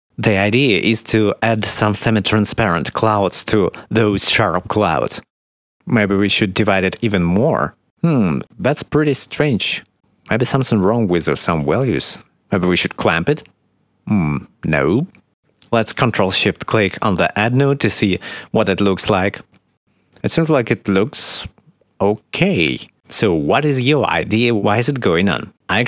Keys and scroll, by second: 0.5 1, 0.6 0, 0.7 Return, 6.2 1, 7.3 0.